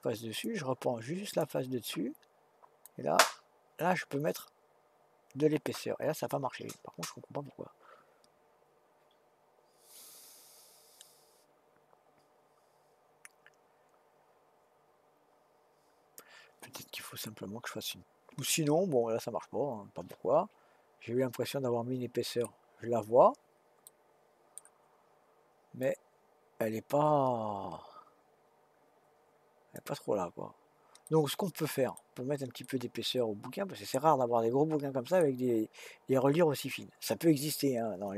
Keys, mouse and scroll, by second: 1.3 click, 2.8 click, 18.5-21.5 middle drag, 22.9-23.9 scroll up 3, 23.9-25.8 middle drag, 25.8 click, 31.0 middle click, 32.0-32.6 scroll down 1, 32.6-35.6 middle drag, 37.5-38.1 middle drag.